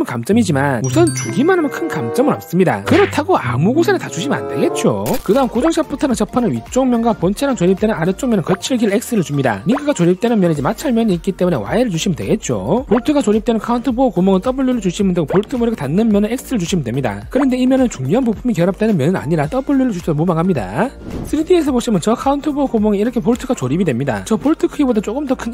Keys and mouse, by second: 21.5-23.8 drag, 25.1-25.5 drag.